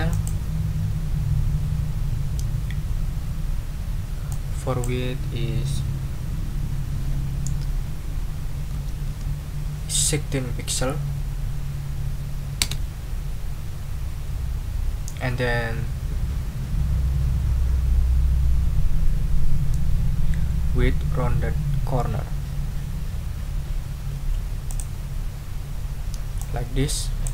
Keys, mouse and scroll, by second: 0.1 click, 4.3 click, 8.7 1, 9.1 6, 12.6 Return, 14.9 ctrl+scroll up 2, 24.7 click, 26.4 click.